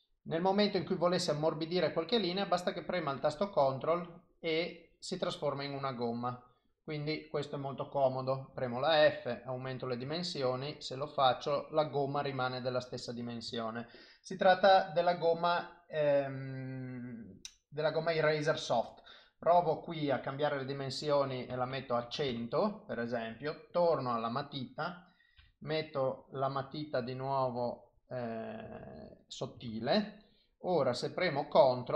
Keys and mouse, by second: 1.0 ctrl+click, 3.8 ctrl+click, 6.2 click, 6.7 click, 8.5 f, 10.4 ctrl+click, 15.0 click, 17.4 click, 22.0 KP_0, 23.7 click, 25.4 f, 28.0 click, 28.8 ctrl+z, 29.1 click, 29.7 ctrl+z, 30.0 click, 30.3 click, 30.8 click, 31.6 ctrl+click.